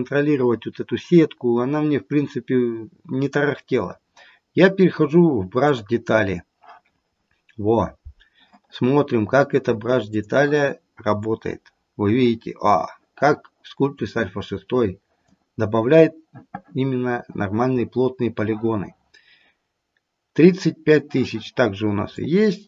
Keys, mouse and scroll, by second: 10.3 click, 11.2 click, 13.9 click, 22.2 click.